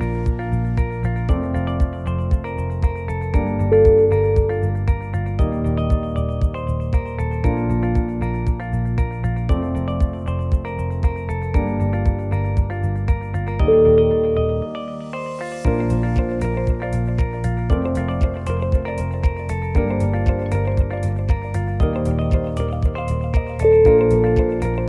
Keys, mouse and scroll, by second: 1.3 middle click, 1.7 click, 2.2 shift+click, 2.6 shift+click, 3.5 f, 3.9 click, 4.2 shift+click, 5.0 shift+click, 5.1 f, 5.4 click, 5.7 shift+click, 6.7 f, 6.9 shift+middle click, 7.1 shift+middle click, 7.4 click, 7.9 click, 8.2 shift+click, 8.5 shift+click, 9.1 f, 9.4 shift+middle click, 9.8 click, 12.3 f, 12.6 click, 12.9 shift+click, 13.7 shift+click, 14.1 f, 14.4 click, 14.7 shift+click, 15.5 f, 15.7 scroll down 2, 15.9 shift+middle click, 16.9 shift+middle click, 17.4 scroll up 1, 17.6 shift+middle click, 18.0 scroll up 1, 18.3 shift+middle click, 19.0 click, 20.2 KP_1, 20.7 e, 21.6 g, 23.4 e, 24.2 g.